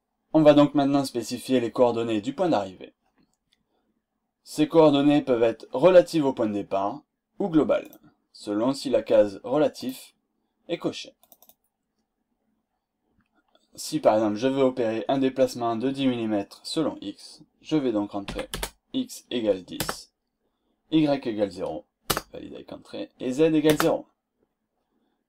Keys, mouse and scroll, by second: 7.8 click, 9.7 click, 11.3 click, 18.2 1, 18.5 0, 19.7 Return, 22.1 Return, 23.7 Return.